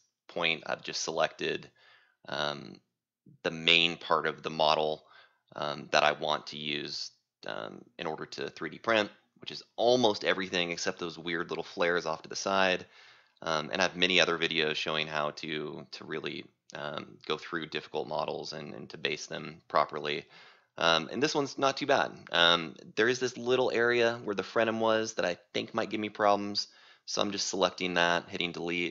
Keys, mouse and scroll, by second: 9.6-11.1 scroll, 11.7 right click, 12.6 c, 16.3 right click, 17.0-18.0 scroll, 17.1-18.0 middle drag, 18.0 c, 18.3-18.9 scroll, 19.5-20.7 scroll, 21.6 right click, 22.8 click, 23.5 click, 23.9 click, 24.5 click, 24.8 click, 25.1 click, 25.7 click, 27.3 click.